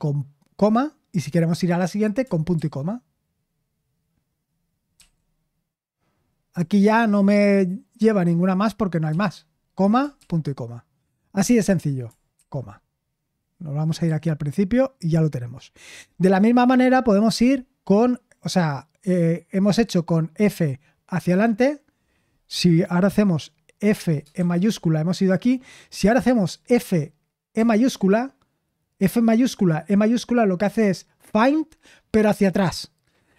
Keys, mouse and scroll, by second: 4.9 typing, 6.5 typing, 7.9 typing, 23.6-24.8 typing, 26.7-27.5 typing.